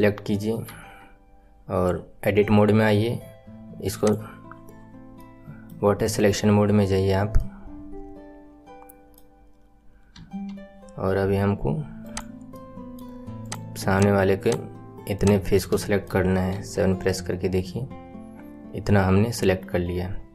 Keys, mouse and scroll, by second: 0.6 Tab, 3.9-5.1 drag, 5.1-10.1 middle drag, 10.1 KP_1, 12.0 click, 12.5 middle click, 13.4 click, 13.8 shift+click, 14.4 shift+click, 15.1 shift+click, 15.7 middle click, 16.5 KP_7, 20.1-20.3 scroll down 1.